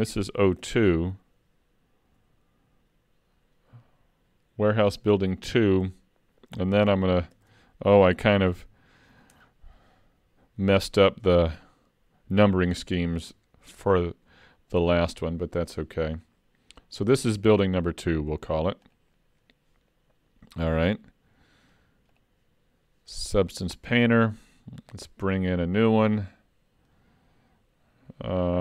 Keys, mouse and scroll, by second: 19.1 click.